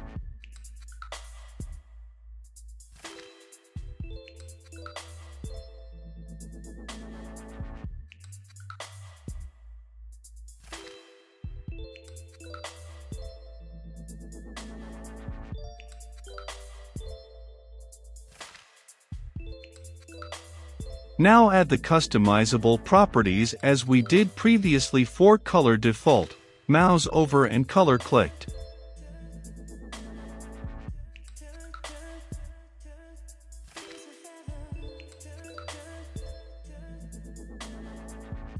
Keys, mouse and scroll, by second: 0.3 click, 0.9 middle click, 1.2 click, 1.8-3.4 typing, 3.9 click, 4.8 ctrl+s, 6.3 click, 7.4 ctrl+c, 8.0-10.0 middle drag, 10.7-12.0 drag, 12.3 ctrl+v, 13.0 ctrl+s, 13.8-20.0 drag, 20.0 Return, 20.7-24.7 typing, 21.1 Return, 22.1 click, 23.8 Return, 25.7 click, 26.2 ctrl+c, 26.5 click, 26.7 Return, 26.8 ctrl+v, 27.1 click, 27.4 Return, 28.3-30.8 typing, 28.6 Return, 29.3 Tab, 29.6 ctrl+z, 30.3 click, 31.6 click, 32.4-33.4 typing, 34.2 click, 34.5 ctrl+c, 34.8 click, 35.2 Return, 35.3 shift+`, 35.7 ctrl+v, 36.1 ctrl+z, 36.9 ctrl+v, 37.9 click.